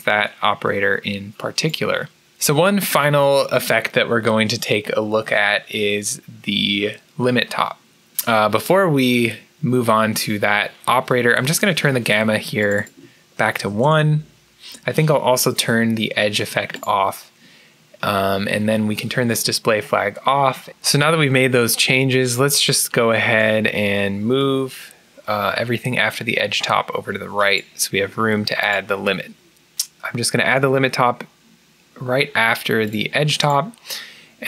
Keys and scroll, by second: 1.8-2.7 typing, 5.1-5.9 typing, 13.7 Return.